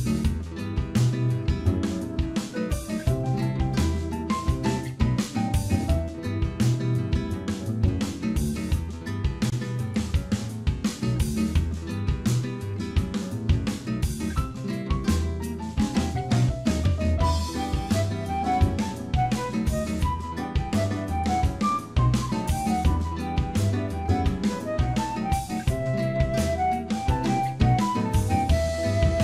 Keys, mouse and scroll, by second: 0.7 middle click, 2.0 click, 2.3 middle click, 3.2 click, 6.9 middle click, 7.5 click, 7.9 middle click, 8.4 scroll down 2, 9.1 click, 9.1-9.4 scroll down 1, 9.4 middle click, 10.5-11.2 scroll up 3, 11.0 click, 11.3 Tab, 11.6 middle click, 12.7 shift+middle click, 13.1 middle click, 17.7 ctrl+r, 20.9 click, 23.6 ctrl+b, 25.5 alt+click, 26.1 alt+shift+click, 27.0 ctrl+b.